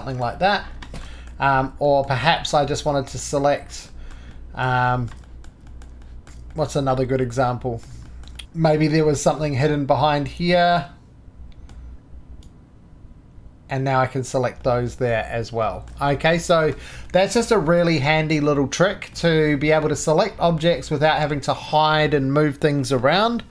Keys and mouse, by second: 1.2 click, 1.2-5.2 middle drag, 5.3 middle click, 6.2 shift+middle drag, 6.5 click, 7.1 middle click, 7.3 middle click, 7.4 click, 7.5-8.3 middle drag, 8.4-11.8 middle drag, 12.4 right click, 14.6 right click, 15.6 shift+right drag, 16.0 click, 16.2-17.0 shift+middle drag, 17.1-19.1 middle drag, 19.1-23.5 drag.